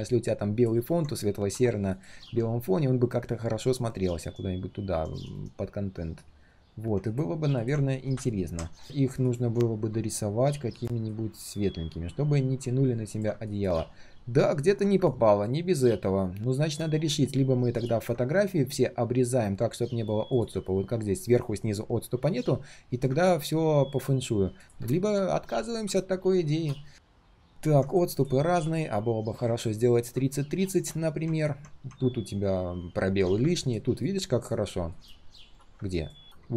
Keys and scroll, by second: 3.6 ctrl+[, 3.9 ctrl+[, 4.2 ctrl+[, 6.0 ctrl+].